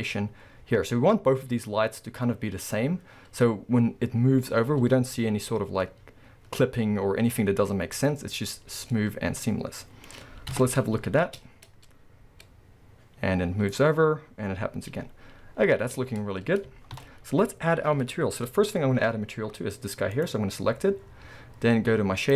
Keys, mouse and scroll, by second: 0.3 scroll up 1, 11.3 space, 16.3-17.0 scroll down 2, 17.0 shift+Left, 18.2-19.0 scroll up 2, 19.0-20.2 scroll up 1, 20.2 click.